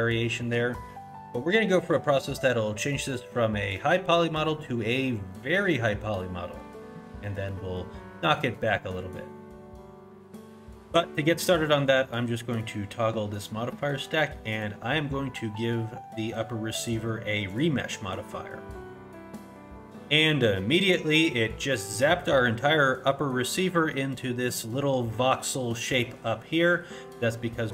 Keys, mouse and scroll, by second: 0.1-1.1 scroll down 2, 0.4 middle click, 7.0 middle click, 7.4 middle click, 8.5-8.9 scroll up 1, 8.9 middle click, 12.5 click, 14.5 click.